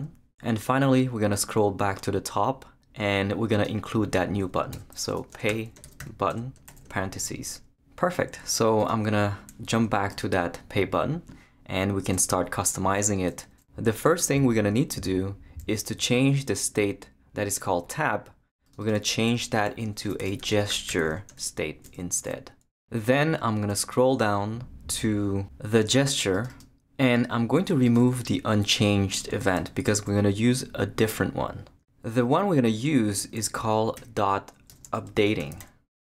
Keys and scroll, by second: 0.0-0.2 typing, 4.4 Return, 4.9-6.7 typing, 19.9-21.9 typing, 22.5 Return, 29.8 shift+BackSpace, 30.4 BackSpace, 33.9-36.0 typing.